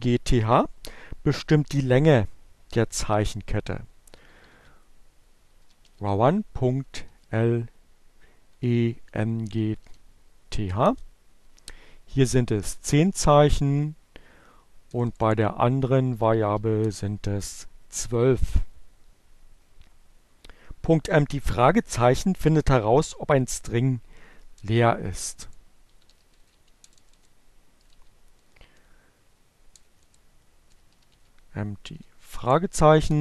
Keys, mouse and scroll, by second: 2.1-3.2 typing, 4.7-5.8 typing, 7.3-8.4 typing, 10.1 Return, 12.8 Left, 15.0-16.4 typing, 22.9 Up, 23.9 BackSpace, 25.1-27.0 typing, 28.1 BackSpace, 28.5 t, 30.6 y, 30.9 shift+0, 31.0 shift+BackSpace, 33.1 Return.